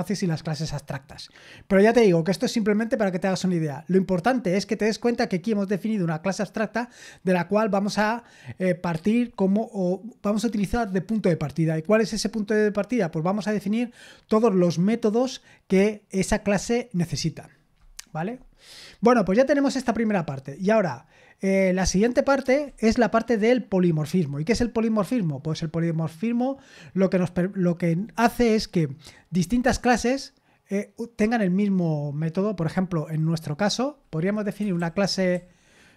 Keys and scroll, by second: 19.6 scroll down 1.